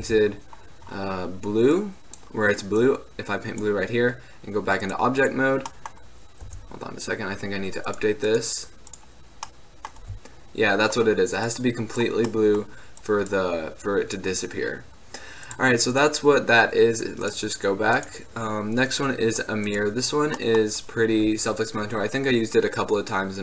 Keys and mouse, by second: 0.2 t, 6.6 t, 9.6-10.1 middle drag, 12.4 middle click, 12.5-15.1 drag, 15.5 drag, 20.1-23.4 middle drag.